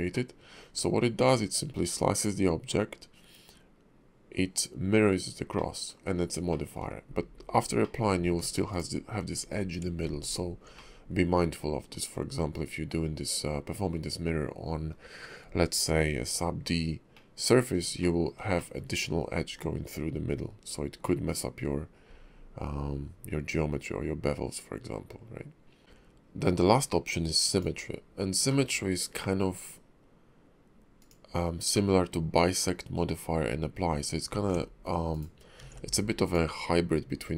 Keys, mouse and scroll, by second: 0.1 middle click, 5.5 middle click, 6.5 shift+middle click, 7.8 middle click, 8.7 alt+click, 9.6 Tab, 10.2 alt+click, 10.7 middle click, 17.1 middle click, 18.0 shift+middle click, 18.5 middle click, 25.8 Tab, 25.8 alt+x, 25.8 click, 28.5 middle click, 31.0 click, 31.7 middle click, 32.5-33.9 scroll up 2, 33.9 scroll down 1, 34.3 ctrl+`, 35.7 alt+x, 36.2 click.